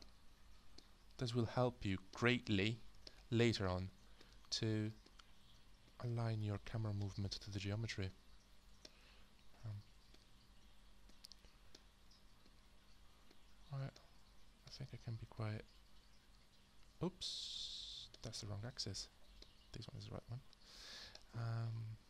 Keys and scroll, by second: 17.7 z.